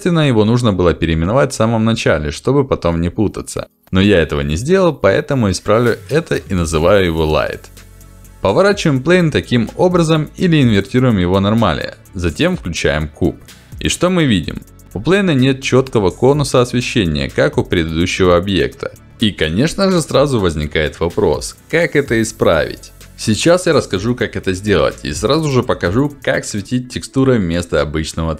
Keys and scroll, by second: 27.4 Delete.